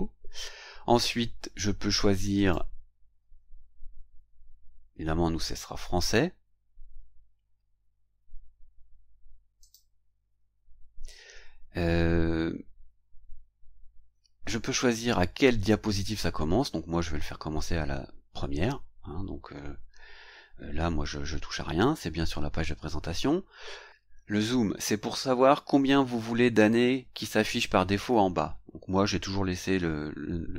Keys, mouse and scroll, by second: 0.8 scroll down 1, 2.3 click, 6.1 scroll up 1, 6.9 scroll down 1, 7.6-8.0 scroll down 1, 9.6 click, 11.9 scroll down 1, 12.9-13.2 scroll down 1.